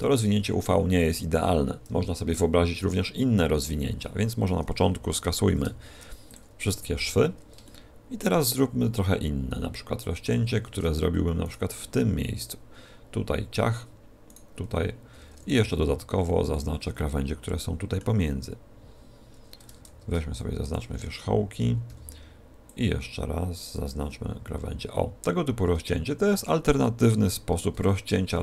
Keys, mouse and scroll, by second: 1.8 KP_1, 5.4 ctrl+e, 6.7 a, 6.9 z, 7.6 shift+middle click, 10.0 a, 10.3 a, 11.4 alt+shift+right click, 14.2 alt+shift+right click, 15.5 b, 19.8 ctrl+Tab, 21.8 b, 24.3 middle click.